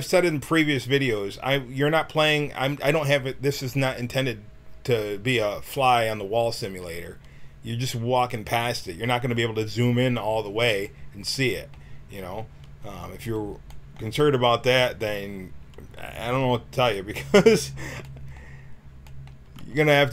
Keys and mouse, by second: 9.1-10.5 middle drag, 19.7 g.